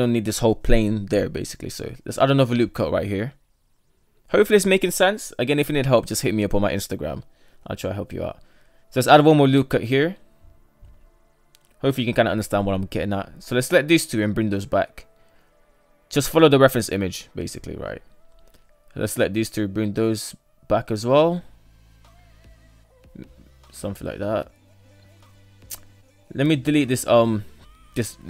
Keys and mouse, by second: 0.7 ctrl+r, 4.2 ctrl+r, 7.9 ctrl+r, 10.6 shift+middle click, 11.5 right click, 12.3 shift+right click, 13.3 g, 17.6 shift+middle click, 18.3 right drag, 18.6 shift+right click, 19.5 g.